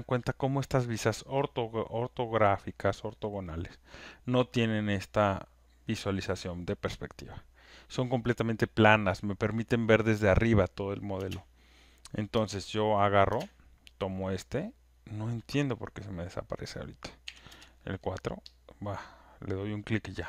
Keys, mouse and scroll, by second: 11.2 space, 12.3 space, 12.9 click, 15.2 click, 15.2 space, 16.2 click, 17.2 4, 17.5 Return, 18.6 click.